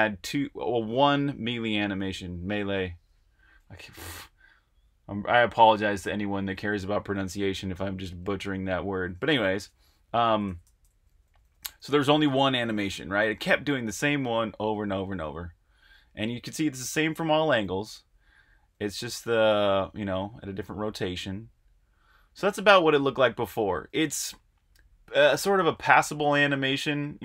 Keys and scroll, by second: 10.0 Left, 10.0-16.7 typing, 17.8-20.8 typing, 23.2-27.2 typing.